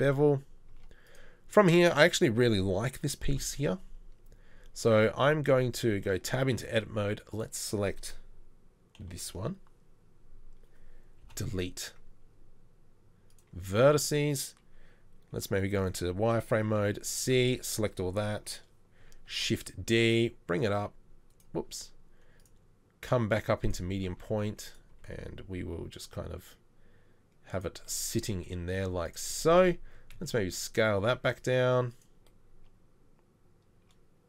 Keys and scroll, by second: 3.8 KP_3, 5.8 Tab, 9.1 ctrl+l, 11.3 ctrl+l, 11.7 Delete, 15.4 z, 17.6 c, 19.3 shift+d, 20.8 s, 24.4 s, 25.2 g, 28.7 z, 30.2 s.